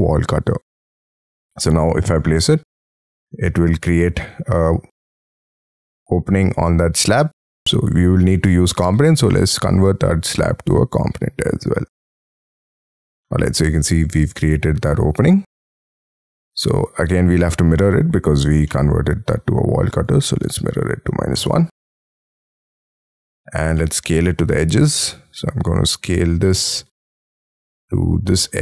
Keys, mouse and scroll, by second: 2.8 middle click, 12.3 middle click, 12.9 space, 13.1 middle click, 16.1 s, 17.1 middle click, 18.6 scroll up 1, 18.7 middle click, 20.8-21.7 typing, 22.6 middle click, 23.3-23.7 scroll down 8, 23.7 shift+middle click, 24.8 scroll up 2, 25.0 s, 26.5 middle click, 27.7 middle click.